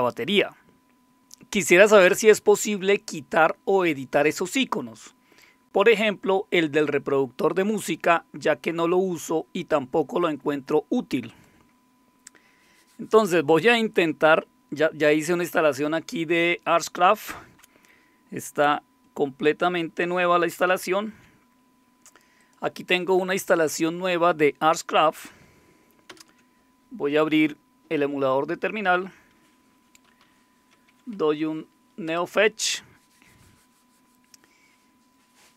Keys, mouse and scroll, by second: 11.3 click, 20.8 super+0, 22.4 click, 26.1 super+Return, 29.8-31.4 typing, 32.1 Return.